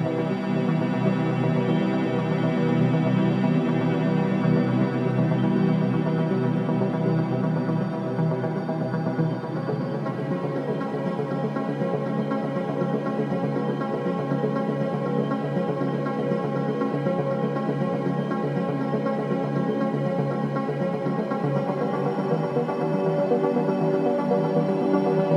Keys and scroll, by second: 1.1 4, 7.8 9, 7.9 Return, 8.1 0, 8.5 Return, 12.5 3, 15.9 F9, 16.7 4, 20.2 ctrl+d, 20.3 Escape, 21.8 9, 22.0 Return, 23.1 ,, 24.3 F1.